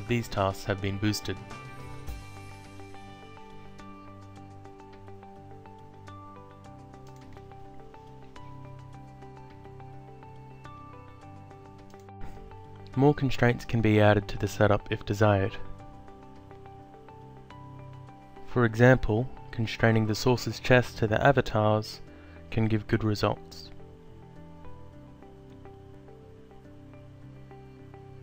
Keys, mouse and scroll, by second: 6.3 click, 7.5 alt+click, 8.8 alt+middle click, 9.6 alt+click, 11.4 alt+click, 13.9 click, 17.1 alt+click, 18.8 click, 22.1 alt+middle click, 23.4 alt+click, 25.9 click, 27.0 Down.